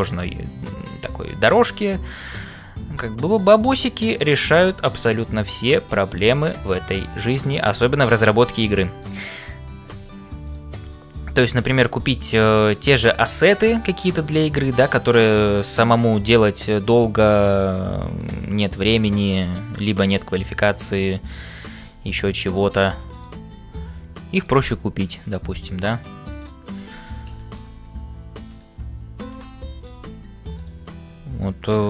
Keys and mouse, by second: 0.0-31.8 typing, 2.2 click, 5.6 click, 7.4 shift+middle click, 9.4 click, 12.6 shift+middle click, 15.0 click, 16.9 click, 18.8 click, 21.3 click, 23.1 click, 24.9 click, 27.4 middle click, 28.6-29.9 middle drag, 30.5 click.